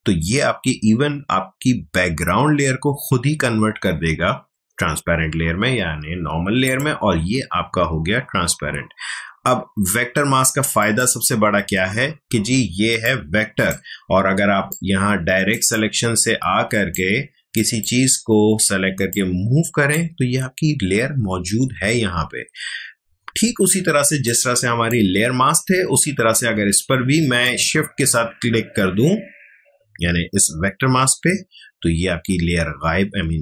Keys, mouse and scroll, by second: 6.6 click, 10.8 click, 12.8 space, 13.0-21.6 ctrl+drag, 21.6 ctrl+z, 22.6 alt+scroll down 1, 24.0 space, 24.2 click, 24.5 space, 27.4 shift+click.